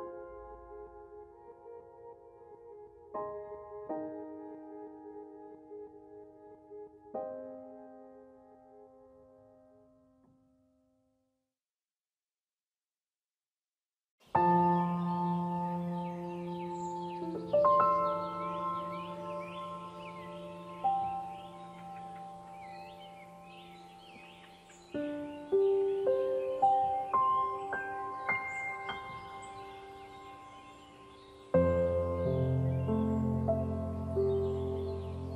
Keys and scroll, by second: 4.5 ctrl+g, 15.6 ctrl+Right, 16.4 ctrl+0.